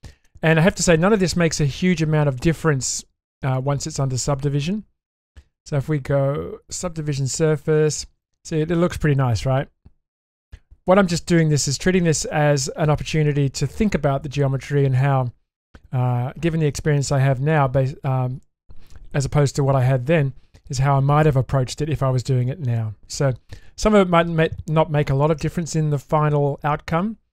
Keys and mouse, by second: 2.5 click, 3.5-6.9 drag, 7.8 shift+space, 8.7-10.4 middle drag, 11.4 shift+middle click, 12.2 shift+space.